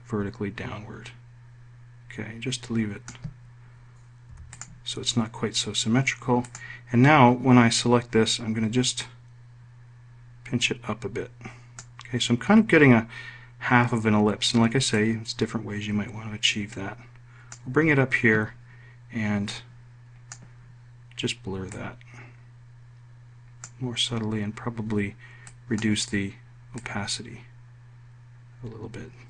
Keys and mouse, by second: 5.2 F1, 5.4 click, 7.3 click, 9.8-12.7 drag, 15.8-18.4 ctrl+drag.